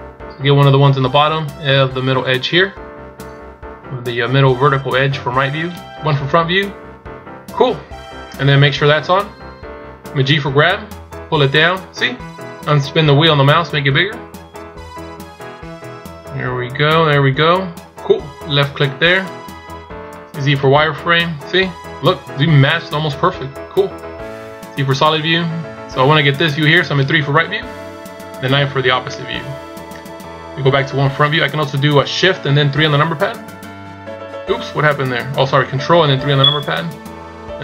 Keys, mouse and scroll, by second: 6.3 KP_1, 27.5 KP_3, 28.5 KP_9, 31.1 KP_1, 33.4 shift+KP_3, 34.7 KP_1, 36.3 ctrl+KP_3.